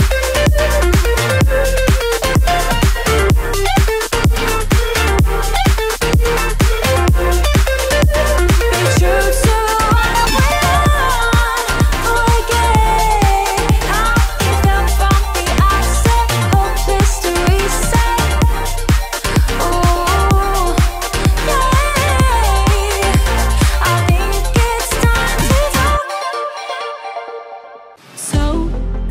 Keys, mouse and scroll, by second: 3.6 click, 4.6-7.8 alt+drag, 7.8 Left, 7.9 Up, 9.2 i, 11.1 m, 11.8-14.2 drag, 14.2 v, 14.9 shift+click, 19.4-20.8 alt+drag, 20.8 v, 21.2 click, 27.1 click.